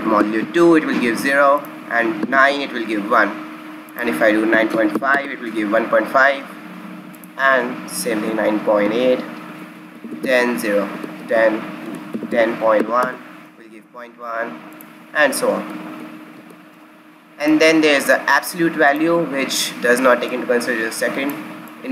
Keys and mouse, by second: 1.1 click, 1.5-3.4 drag, 3.8-5.7 drag, 7.1-9.0 drag, 9.5 KP_Enter, 14.7-16.5 drag, 17.3-19.3 drag, 20.2-21.9 drag.